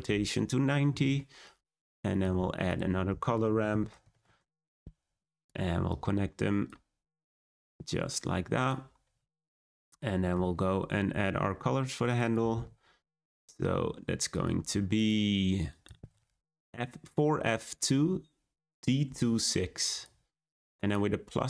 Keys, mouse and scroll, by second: 1.0-4.2 drag, 4.2 shift+a, 5.8-6.6 drag, 7.4-8.6 drag, 9.3-10.0 scroll up 4, 10.0-14.4 shift+middle drag, 14.4 click.